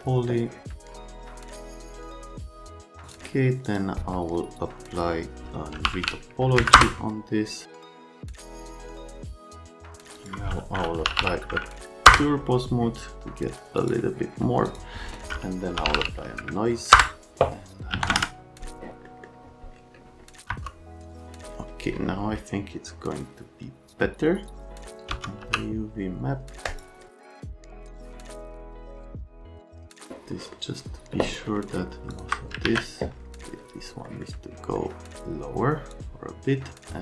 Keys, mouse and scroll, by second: 0.8 click, 1.0 click, 1.3 click, 1.9 middle click, 2.2 Delete, 2.4 middle click, 2.5 middle click, 2.8 Delete, 3.0 click, 3.6 click, 5.6-6.4 typing, 6.5 Down, 6.7 Return, 7.7 e, 8.0 click, 9.3 middle click, 9.4 alt+middle click, 9.5 right click, 9.6 alt+right click, 10.2 click, 10.8-11.6 typing, 12.0 Return, 13.8 click, 14.6 click, 15.5-16.4 typing, 16.9 Return, 17.9 KP_1, 18.0 KP_0, 18.0 KP_Enter, 19.0 middle click, 20.4 F3, 25.1 v, 25.4 w, 26.6 click, 27.2 middle click, 27.5 middle click, 27.6 right click, 27.8 click, 28.2 middle click, 28.5 scroll down 1, 28.9 middle click, 29.1 scroll up 1, 29.5 middle click, 30.3 scroll down 1, 31.3 scroll down 1, 32.1 click, 32.6 alt+q, 34.0 right click, 34.7 right click.